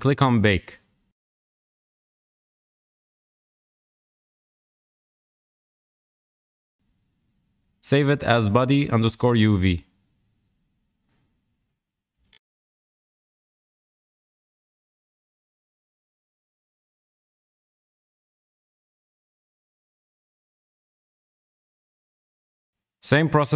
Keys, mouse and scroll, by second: 3.2 click, 11.1 alt+shift+s.